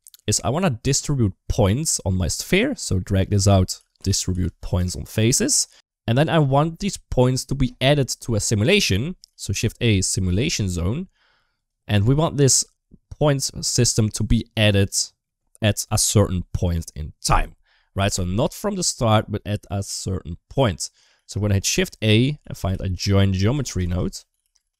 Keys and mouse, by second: 1.0 click, 2.7 click, 3.0-5.4 drag, 6.8 middle click, 8.2 click, 8.4 click, 9.1 shift+a, 13.0 click, 21.0 shift+a, 23.8 shift+a.